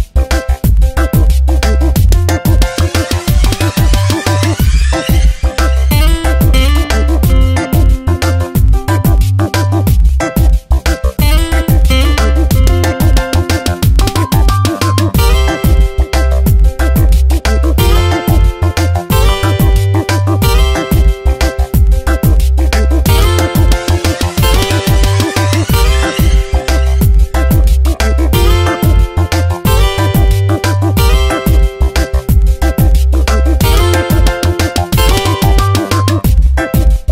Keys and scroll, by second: 2.3 Delete, 3.2 ctrl+z, 3.9 v, 5.9 ctrl+shift+i, 6.3 Delete, 7.2 ctrl+z, 8.1 ctrl+shift+i, 8.5 Delete, 9.0 ctrl+d, 9.3 v, 11.3 e, 19.6 Return, 20.2 v, 21.2 space, 21.6 e, 26.9 ctrl+z, 29.4 ctrl+z, 32.8 space, 36.7 space.